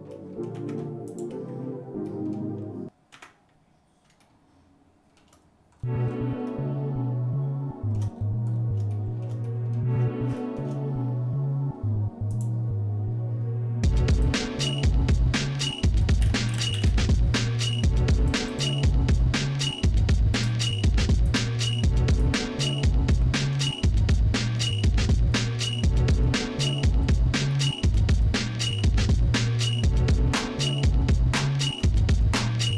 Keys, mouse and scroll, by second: 0.1 middle click, 0.6 Tab, 1.1 click, 2.1 middle click, 3.1 Tab, 4.2 shift+middle click, 5.8-6.4 scroll up 2, 6.5-8.0 shift+middle drag, 8.2 scroll down 1, 8.5 scroll down 2, 8.9 shift+middle click, 9.5 middle click, 10.4 shift+middle click, 12.3 click, 14.5-19.0 drag, 20.4-21.5 drag, 22.3 click, 23.1 Tab, 23.8 shift+middle click, 24.9 middle click, 25.4 shift+middle click, 26.8-27.4 scroll down 2, 27.5 shift+middle click, 28.9 KP_Divide, 29.8 scroll down 1, 30.4-31.8 shift+middle drag, 32.0 middle click, 32.5-32.7 shift+scroll up 3.